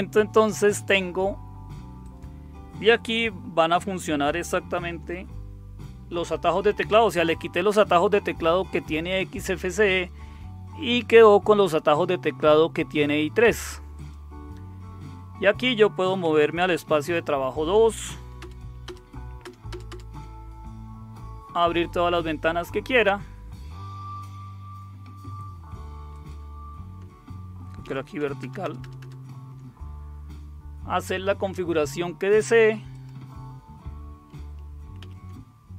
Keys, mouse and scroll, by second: 2.0 click, 4.7 shift+super+q, 12.4-13.5 drag, 13.9 click, 16.8 super+2, 18.4 super+Return, 18.8 super+Return, 19.4 super+Return, 26.1 click, 26.7 click, 27.8 super+v, 28.4 super+Return, 28.8 super+Return, 32.9 click, 35.0 super+3.